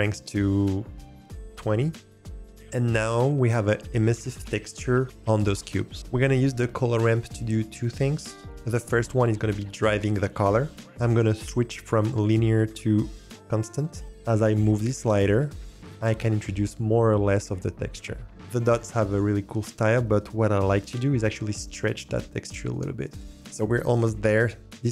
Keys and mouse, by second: 12.0-13.2 drag, 14.0-15.7 drag, 15.7-18.3 middle drag, 23.2 click.